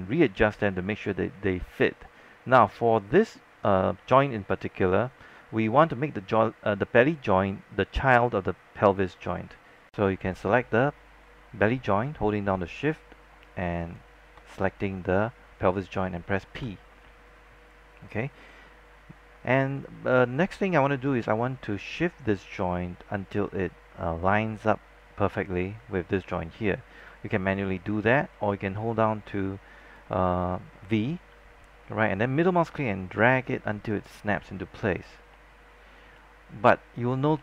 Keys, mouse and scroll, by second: 1.7 alt+middle click, 2.1 scroll up 1, 2.9-4.1 alt+middle drag, 9.9 click, 13.9 shift+click, 16.7 p, 25.4-28.7 drag, 28.7-32.7 typing, 32.2 middle click, 34.6-35.0 scroll down 1, 35.4 alt+middle click, 36.2 alt+middle click.